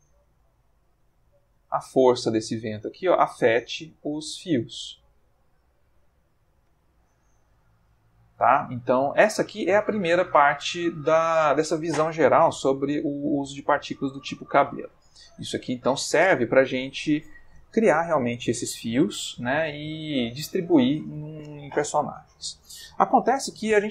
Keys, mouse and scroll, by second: 0.8-7.1 drag, 6.7 Escape, 7.5 x, 7.8 click, 8.2-9.0 middle drag, 9.2 ctrl+middle click, 9.6-11.5 ctrl+middle drag, 12.9-14.7 middle drag, 15.0-15.9 middle drag.